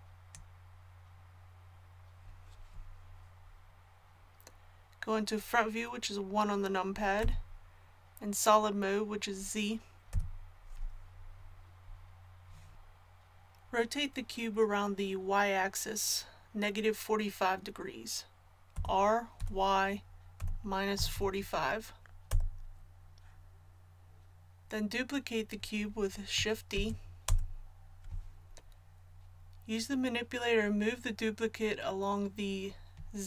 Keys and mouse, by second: 7.2 KP_1, 10.1 z, 18.7 r, 26.7 shift+d.